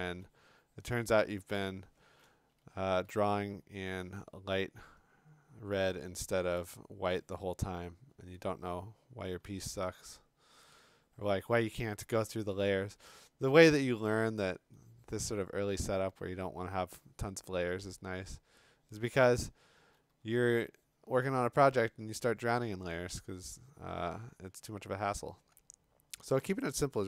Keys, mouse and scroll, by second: 1.3-3.7 typing, 5.2 click, 6.6 b, 8.3 click, 9.4 ], 9.7 ], 10.6 click, 13.2-13.8 [, 19.8 [.